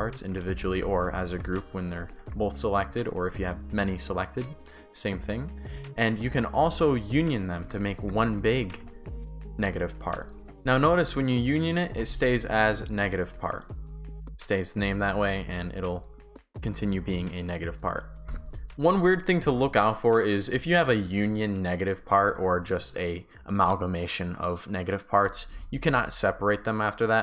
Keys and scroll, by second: 7.6-10.4 typing, 10.5 Pause, 18.2 shift+d, 18.3 Pause.